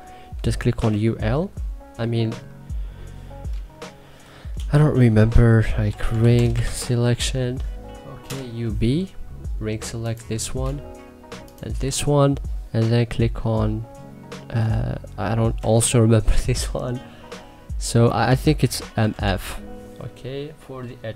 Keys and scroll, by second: 0.4 u, 0.7 l, 3.6 shift+c, 5.3-7.0 typing, 7.9 Return, 15.2 shift+c, 17.9 Escape, 18.6 m, 18.9 f.